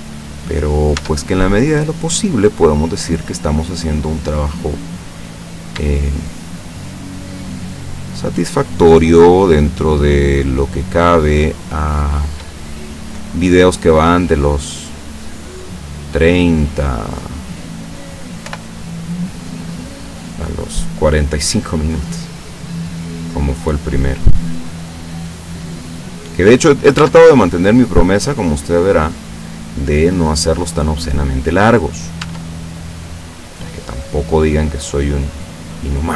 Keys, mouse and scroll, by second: 1.0 Tab, 1.4-4.9 middle drag, 5.4 right click, 6.1 shift+right click, 6.5 shift+right click, 7.6 shift+right click, 8.1 shift+right click, 8.6 shift+right click, 9.5 shift+right click, 10.1 shift+right click, 10.6 shift+right click, 11.1 shift+right click, 12.2 shift+right click, 12.6 shift+middle click, 13.8-17.5 drag, 18.5 o, 19.1 click, 19.7-20.3 scroll down 2, 23.7-24.0 scroll down 1, 27.0 Tab, 27.4-32.1 middle drag, 32.8 Tab, 32.8 middle click, 34.0 right click, 35.0-36.1 drag.